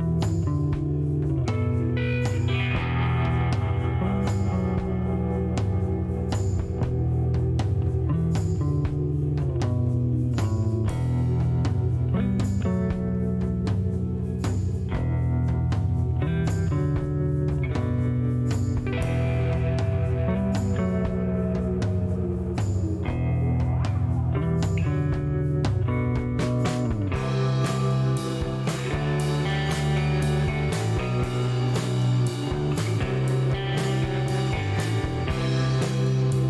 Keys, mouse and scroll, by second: 1.3 shift+scroll down 3, 2.2 middle click, 2.7 shift+right click, 3.3 shift+scroll down 2, 3.5 middle click, 4.3-4.7 scroll up 3, 5.9 middle click, 7.0 shift+right click, 8.1 shift+click, 9.5 click, 10.5 middle click, 11.0 scroll up 1, 11.3 middle click, 11.9 middle click, 13.4 click, 15.7 click, 18.3 click, 18.7 right click, 19.4 click, 20.7 click, 22.2 scroll down 1, 22.8 click, 24.4 click, 26.8 click, 35.9-36.4 typing.